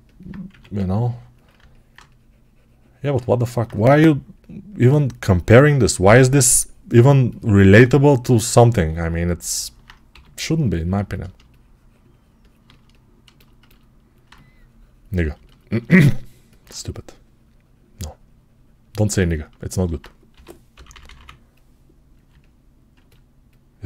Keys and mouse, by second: 0.1-6.8 drag, 0.3 1, 3.8 3, 6.8-12.5 right drag, 10.0 g, 12.5-16.4 alt+shift+drag, 20.2 g, 20.6 ], 20.8 ].